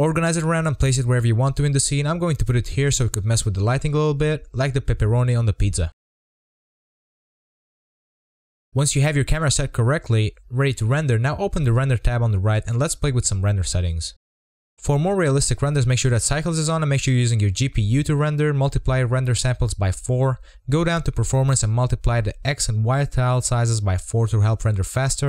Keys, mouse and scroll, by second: 0.0 click, 0.0 scroll up 4, 0.1 z, 0.5 scroll down 1, 0.6 click, 0.7 click, 0.7 g, 1.3 scroll down 4, 1.5 scroll up 1, 1.5 z, 2.0 z, 2.1 scroll up 3, 2.2 shift+middle click, 2.4 click, 2.9 scroll up 3, 3.4 click, 6.1 scroll, 6.2 click, 6.3-6.8 scroll down 4, 6.9 click, 6.9 g, 7.7 g, 8.0 click, 8.0 0, 8.2 scroll up 5, 8.7 scroll down 3, 8.9 click, 9.3 BackSpace, 9.4 0, 9.7 click, 10.6 click, 10.7 0, 10.9 scroll up 4, 11.5-12.4 scroll down 2, 13.8 click, 15.0-18.8 drag, 22.7-25.2 drag.